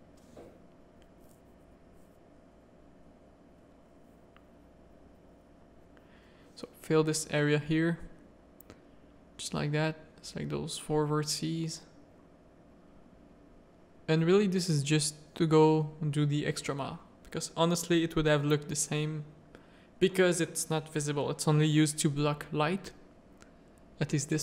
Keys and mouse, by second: 0.4 alt+click, 0.8 x, 1.3 a, 1.8 middle click, 3.1 2, 3.7 f, 3.7 1, 4.0 a, 4.4 middle click, 5.4 middle click, 6.0 2, 6.3 f, 6.5 1, 6.8 middle click, 7.0 a, 7.1 middle click, 7.6 shift+middle click, 8.0 middle click, 9.4 click, 10.0-11.1 shift+drag, 11.3 f, 11.6 a, 11.9 middle click, 14.0 shift+click, 14.6-16.1 typing, 16.6 ctrl+r, 18.2-22.0 typing, 20.9 Tab, 22.9 alt+a, 24.3 Tab.